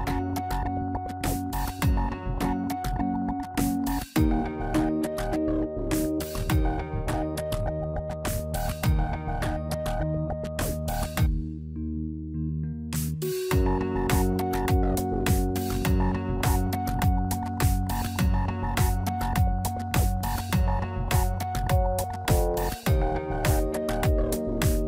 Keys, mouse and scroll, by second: 0.1 Tab, 0.7 middle click, 1.8 scroll up 1, 2.8 middle click, 3.5 scroll down 4, 3.9 middle click, 4.8 scroll down 1, 6.0 click, 6.1 Tab, 6.6 click, 7.0 middle click, 7.9 scroll up 1, 8.4 Tab, 9.1 a, 10.3 click, 10.7-11.1 scroll up 1, 12.0 i, 19.3 middle click, 19.7-20.3 scroll up 3, 20.2 click, 21.8 click, 22.8 click, 23.6 g.